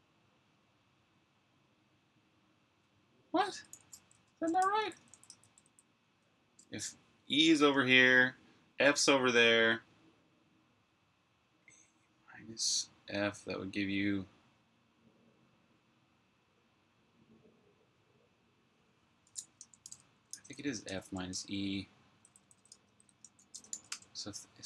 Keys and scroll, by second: 3.9 Return, 4.1-6.3 typing, 19.4-24.6 typing.